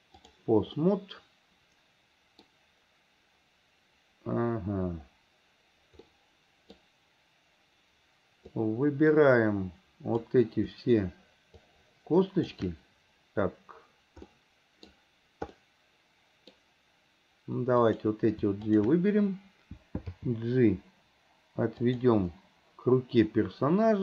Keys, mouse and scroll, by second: 0.9-8.5 middle drag, 8.5-10.4 drag, 11.7-12.6 shift+drag, 14.3-17.8 middle drag, 17.8 click, 18.7 shift+click, 20.2 g.